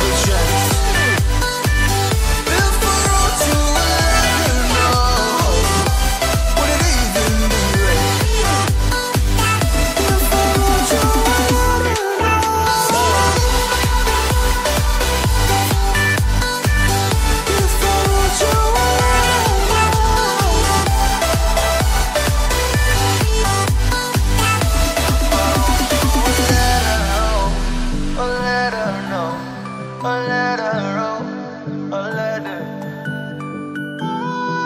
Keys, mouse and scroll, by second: 0.4 scroll up 1, 1.5 click, 1.6 double click, 2.2 click, 2.3 double click, 2.5-2.9 scroll up 1, 2.9 click, 3.6-4.1 scroll down 1, 4.6-5.4 scroll up 1, 6.0 click, 6.1 double click, 6.7 click, 8.8 scroll down 1, 11.0 scroll up 1, 11.6-11.9 scroll down 1, 12.5-13.3 scroll up 1, 13.3 click, 21.2-21.9 scroll down 1, 22.2 scroll up 1, 23.0 click, 23.3 double click, 23.6-23.9 scroll down 1, 24.5 click, 24.8 scroll up 1, 25.3 click, 25.5 double click, 25.7-26.5 scroll up 1, 26.5 click, 27.7 scroll down 1, 28.5-30.5 scroll up 1, 30.6 click, 31.7-32.1 scroll up 1, 32.1 click, 32.8-33.3 scroll down 1.